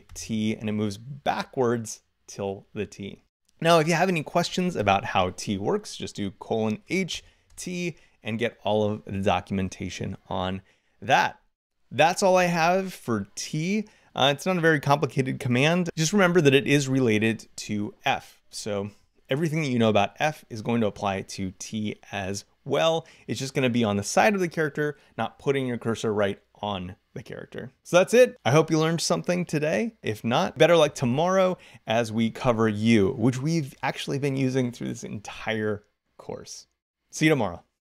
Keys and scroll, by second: 0.4 t.